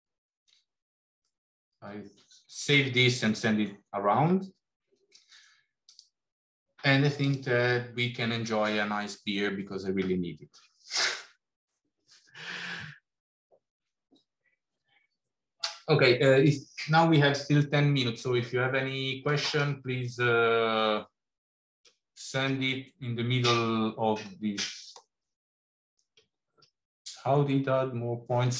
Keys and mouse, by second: 1.1-2.4 middle drag, 5.8-8.7 drag.